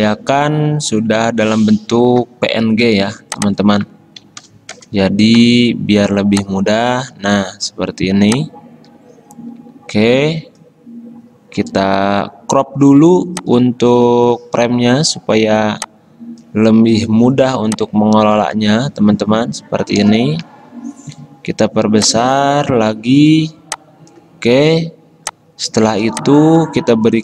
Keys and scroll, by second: 4.1-5.0 typing, 10.4-11.2 typing, 20.2 Return.